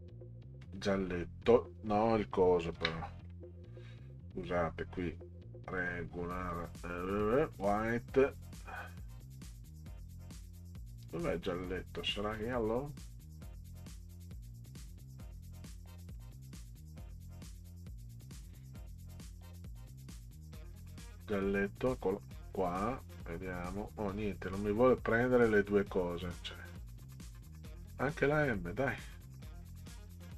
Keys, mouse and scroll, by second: 0.6 click, 2.7 ctrl+z, 4.4 click, 5.7 click, 6.4 click, 7.5 click, 8.5 scroll down 2, 9.3-10.1 scroll down 6, 10.4 scroll up 2, 11.0 middle click, 12.3 click, 14.3-16.2 drag, 17.7 click, 19.0 scroll up 2, 19.6 scroll down 4, 21.2 click, 24.5 click, 26.4-27.9 drag, 30.0 click.